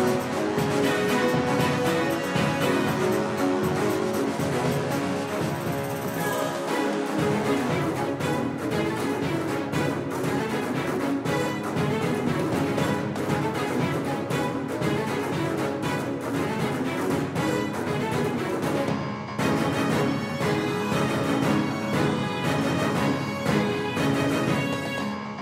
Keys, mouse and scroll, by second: 6.2 r, 13.9 middle click, 14.7-16.9 middle drag, 16.9 KP_5, 17.3 KP_1, 17.9 KP_3, 20.2-21.4 drag, 21.6 KP_5, 22.2 click, 22.4 click, 23.0-24.6 middle drag, 24.6-25.4 drag.